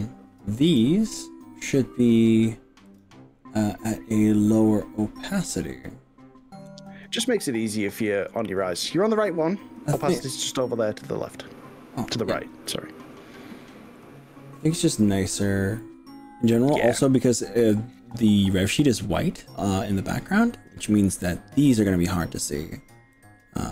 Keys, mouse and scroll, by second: 0.7 click, 2.9 click, 10.7 click, 12.1 click, 13.1-16.7 drag, 23.3 click.